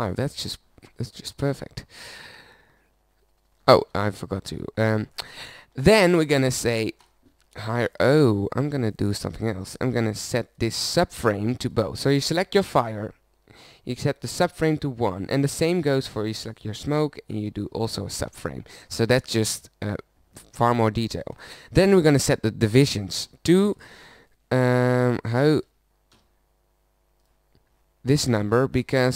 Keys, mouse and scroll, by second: 0.8-2.3 middle drag, 2.3 shift+z, 3.6 z, 3.8 z, 8.7 click, 18.0 middle click, 19.5 click.